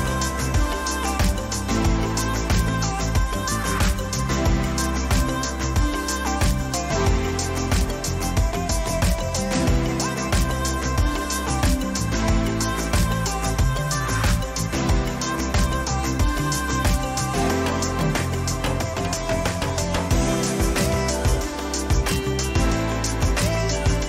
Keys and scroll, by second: 2.9 ctrl+alt+z, 3.8 ctrl+t, 4.2 ctrl+-, 6.5 ctrl+-, 15.4 Return, 16.0 ctrl++, 18.3 Right, 19.6 Up.